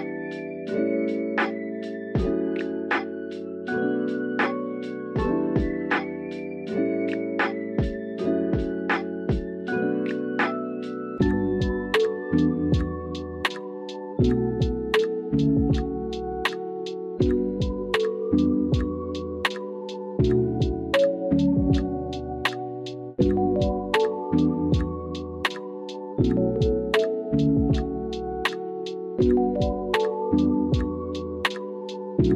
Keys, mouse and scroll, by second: 0.3 Tab, 1.0 alt+z, 1.5 middle click, 2.4 shift+middle click, 3.4 alt+shift+click, 3.8-5.4 drag, 6.3 f, 6.8 middle click, 7.8 k, 11.1 k, 13.3 click, 13.6 middle click, 14.4 KP_1, 15.6 ctrl+r, 16.7 KP_3, 17.6 click, 19.1-20.2 drag, 20.5 ctrl+r, 22.1 click, 22.3 ctrl+z, 22.7 ctrl+z, 23.2 ctrl+r, 25.1 Tab, 25.3 click, 25.7 ctrl+s, 26.2-26.8 middle drag, 27.9 KP_1, 28.9 alt+z, 30.5-32.3 middle drag.